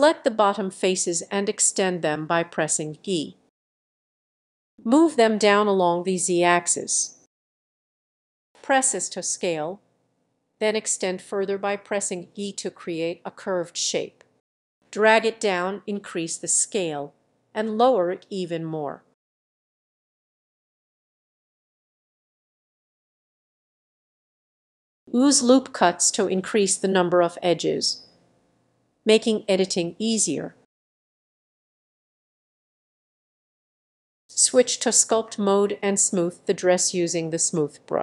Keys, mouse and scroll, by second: 0.0-3.3 drag, 3.3 scroll down 3, 3.6 middle click, 4.0 click, 4.1 middle click, 4.6 e, 5.1 click, 5.4-6.6 middle drag, 6.9 click, 7.1 middle click, 7.5 s, 9.5-10.8 drag, 10.8 e, 11.7-13.8 drag, 14.1 click, 14.4 s, 16.5-19.9 drag, 20.7 click, 20.9-22.6 middle drag, 22.6-23.9 drag, 24.5-33.7 drag, 33.7 middle click, 33.7-34.6 scroll up 4, 34.6 s, 34.9-37.5 drag, 37.5 middle click.